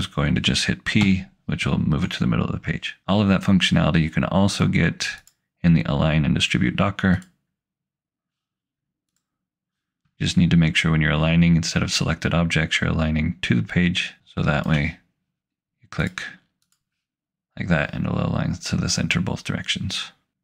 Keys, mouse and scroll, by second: 1.0 p, 5.2 click, 14.2 click.